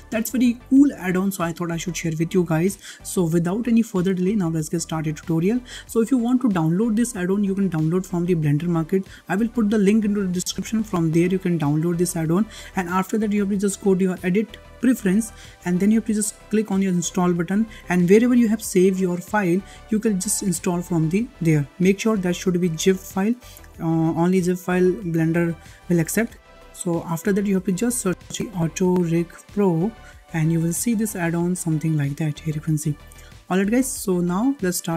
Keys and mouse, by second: 4.2-5.6 shift+middle drag, 14.0-15.1 drag.